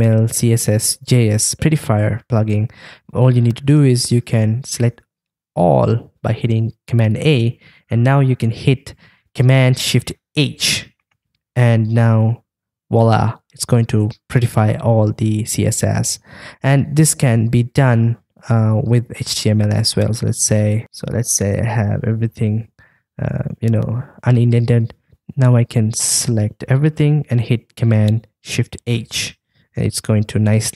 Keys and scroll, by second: 5.6 super+a, 10.4 shift+super+h, 20.8 super+[, 21.5 super+[, 21.8 super+[, 23.8 super+[, 28.9 shift+super+h.